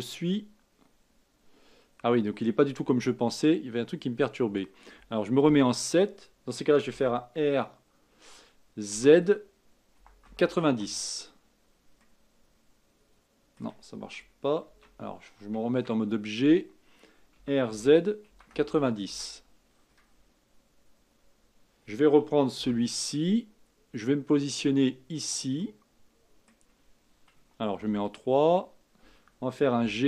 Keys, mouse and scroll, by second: 0.3-3.3 middle drag, 5.4 KP_7, 6.9 r, 12.0-14.7 middle drag, 14.7 ctrl+z, 15.7 Tab, 17.3 r, 20.0-21.9 scroll down 1, 22.6 g, 25.6-27.7 middle drag, 27.7 KP_3, 29.8 g.